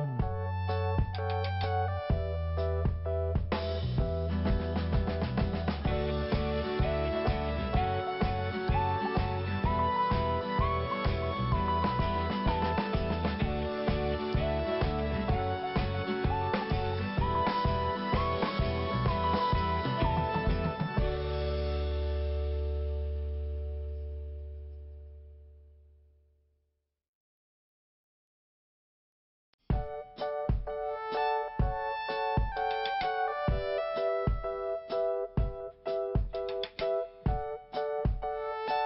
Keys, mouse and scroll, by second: 0.6 click, 3.0 click, 3.1 click, 4.3 click, 4.7 click, 5.5 click, 6.3 click, 7.6 click, 10.0 click, 10.9 click, 12.1 scroll down 1, 13.8 scroll up 1, 16.3 click, 17.8 click, 19.3 scroll down 2, 20.0 scroll up 1, 20.2 scroll down 1, 20.3 scroll up 1, 20.5 click, 21.5 click, 23.5 click, 24.4 scroll down 1, 26.2-26.6 scroll up 1, 28.0 scroll down 1, 29.5 5, 32.1 click, 33.4 scroll up 1, 35.4-35.7 scroll down 1, 37.4 click.